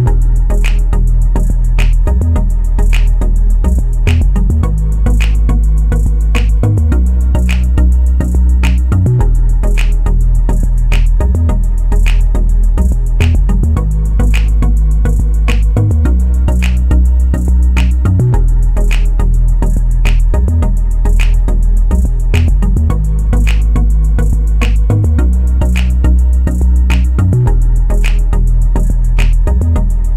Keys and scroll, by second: 10.9 ., 11.3 5, 11.8 Return.